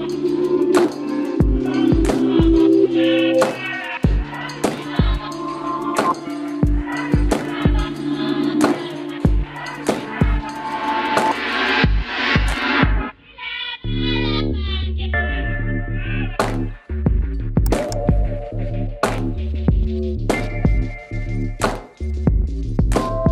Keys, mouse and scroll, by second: 0.3 b, 1.7-3.4 drag, 3.9 middle click, 5.0 right click, 5.1 g, 6.1 right click, 6.3 right click, 6.6 g, 9.1-12.2 right drag, 9.3 g, 10.6 g, 12.2 ctrl+Tab, 13.1 ctrl+s, 15.7 ctrl+Tab, 15.9 middle click, 17.0 right click, 17.8 c, 22.8-23.3 right drag, 23.1 c.